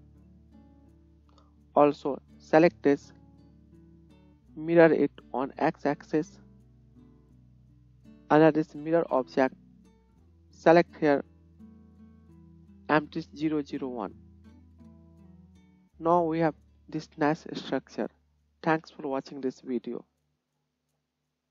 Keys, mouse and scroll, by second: 2.3-4.5 drag, 6.8-21.5 drag, 6.8-15.4 middle drag, 6.8-15.4 right drag.